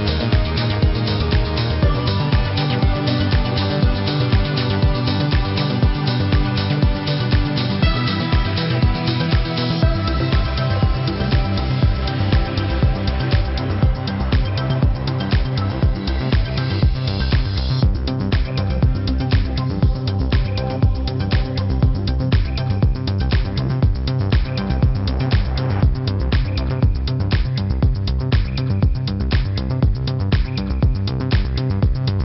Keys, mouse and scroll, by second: 0.0 click, 0.7 click, 1.3 click, 1.7 space, 1.8 click, 1.9 space, 2.2 v, 2.3 click, 3.4 Left, 3.7 click, 4.6 click, 5.1 b, 5.4 z, 5.7 click, 7.8 v, 8.0 click, 8.7 ctrl+-, 9.2 click, 9.5 ctrl+=, 12.2 space, 12.4 click, 12.7 space, 15.9 click, 20.2 click, 21.9 click.